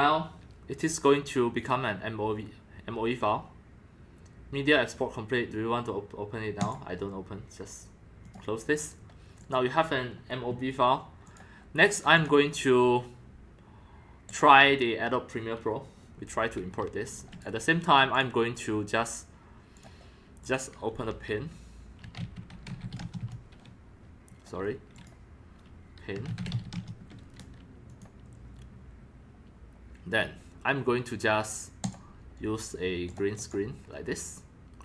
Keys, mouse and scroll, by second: 6.7-8.8 drag, 9.4 click, 10.0-11.3 drag, 11.8 right click, 12.1 click, 14.3 click, 16.2-16.5 drag, 16.6 drag, 17.3 right click, 17.4 drag, 18.1 click, 18.2-19.4 drag, 19.7 click, 20.4 click, 21.8-23.3 typing, 24.9 click, 25.3 click, 25.9-27.1 typing, 27.9 shift+click, 28.9-30.7 drag, 31.8 click, 33.1 click, 33.4 click.